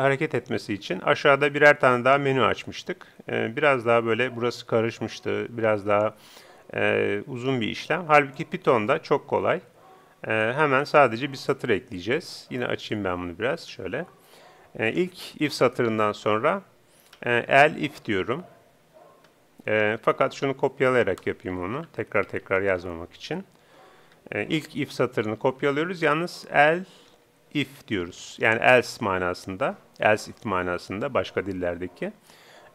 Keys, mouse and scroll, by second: 10.6-32.7 drag.